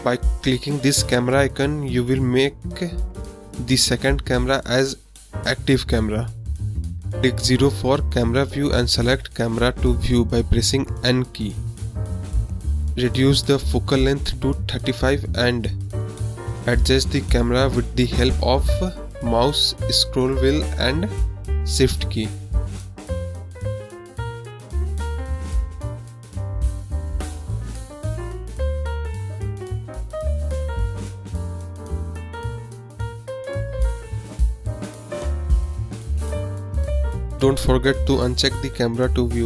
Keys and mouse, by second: 2.7 KP_0, 5.1 n, 6.0 click, 6.9 n, 9.7 click, 11.6-12.2 shift+drag, 12.2 shift+middle click, 13.2 shift+click, 13.7 middle click, 14.4 shift+drag, 14.6 shift+middle click, 14.7 shift+click, 15.1-15.8 middle drag, 16.0-16.8 shift+middle drag, 23.8-24.8 drag, 27.7-28.1 middle drag, 28.3 shift+middle drag, 28.7 click, 29.1 shift+click, 29.9 shift+middle click, 30.1 middle click, 30.2 click, 30.4 shift+click, 31.5 click, 32.2-32.8 shift+middle drag, 33.0-33.5 shift+middle drag, 33.6-34.1 drag, 34.4 shift+click, 36.2 click, 37.5 n, 38.1 click, 38.4 n, 39.3 drag, 39.4 middle click.